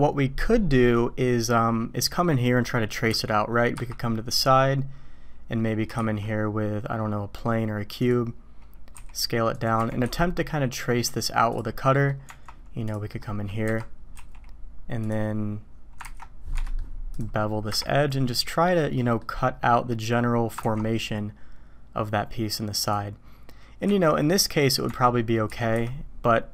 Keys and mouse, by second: 3.1 KP_1, 3.7 KP_5, 6.0 shift+a, 8.9 s, 9.8 g, 11.8 drag, 12.3 Tab, 13.1 click, 13.6 KP_1, 14.1 z, 15.0 click, 16.0 ctrl+b, 16.5 Escape, 16.6 click, 17.7 KP_1, 19.1 click, 20.6 ctrl+b, 23.8 z, 24.5 click, 24.9 Tab, 25.4 s.